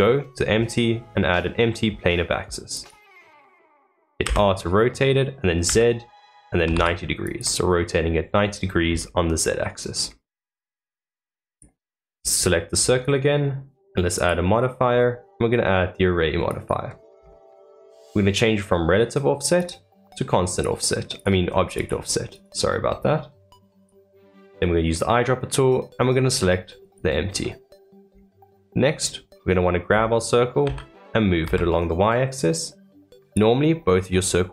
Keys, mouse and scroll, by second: 3.3 middle click, 4.2 r, 9.9 scroll down 2, 10.3-11.5 middle drag, 11.5 click, 12.0-12.7 scroll up 3, 12.7 scroll up 2, 14.1-17.1 drag, 17.1-19.5 scroll down 4, 19.5 click, 20.4 click, 21.1 click, 21.7 click, 22.3-23.8 drag, 27.4-28.0 middle drag, 28.0 scroll up 3, 28.5-29.2 middle drag, 29.2-30.6 scroll up 1, 30.6 g.